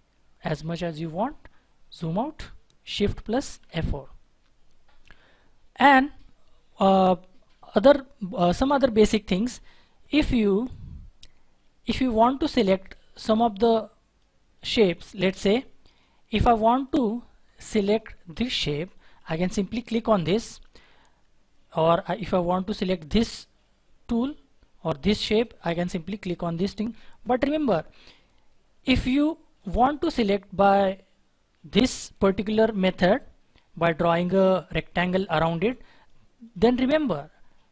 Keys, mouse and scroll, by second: 0.7-1.8 scroll down 1, 3.6 shift+F4, 10.6-12.1 scroll up 1, 12.1-12.5 scroll down 1, 15.3 scroll up 1, 17.4-17.8 scroll down 1, 18.3 double click, 26.5 double click, 36.8-37.7 scroll up 1.